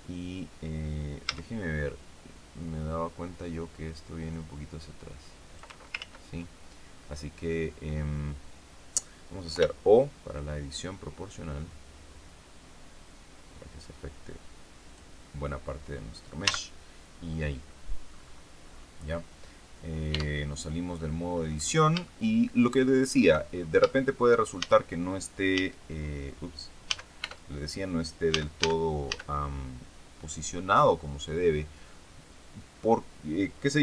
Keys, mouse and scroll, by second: 1.2 z, 4.2-5.7 drag, 5.9 ctrl+z, 9.4 o, 10.3-11.8 drag, 11.8-12.2 scroll down 1, 12.6 scroll down 2, 15.4 scroll down 2, 16.4 z, 16.9-17.8 scroll down 2, 18.0-18.6 scroll up 2, 18.6-19.2 scroll down 2, 20.0 Tab, 20.7-21.0 scroll down 2, 21.2-21.8 scroll up 2, 22.0-23.3 shift+middle drag, 23.4-23.8 shift+scroll up 2, 23.8 shift+middle click, 24.5 shift+a, 25.4 a, 26.8 a, 27.2 Tab, 28.2 a.